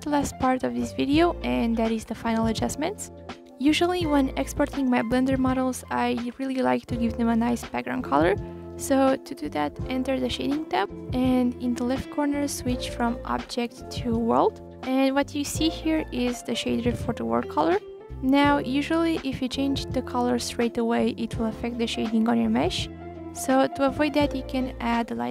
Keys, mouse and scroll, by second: 1.4 click, 12.3 click, 13.7 click, 17.9 click, 21.1 shift+a.